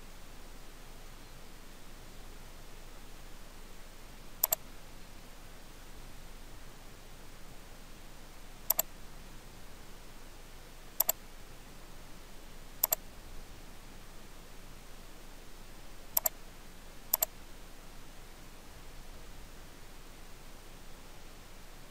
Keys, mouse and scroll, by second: 0.2 middle click, 2.8 scroll down 1, 3.3 middle click, 4.6 click, 5.2 middle click, 8.8 click, 16.2 click.